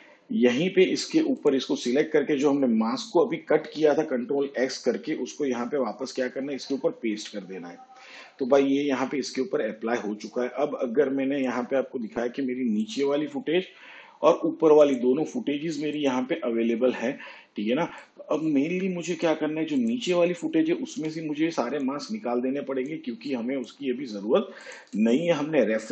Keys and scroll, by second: 6.4 ctrl+v, 20.9 m.